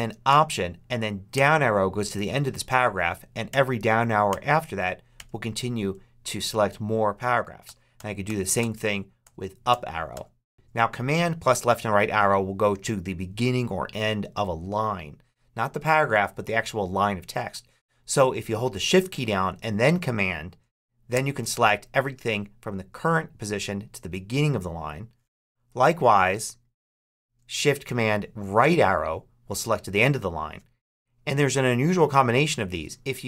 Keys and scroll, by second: 1.2 alt+shift+Down, 3.4 alt+shift+Down, 7.5 alt+shift+Up, 21.0 shift+super+Left, 28.5 shift+super+Right.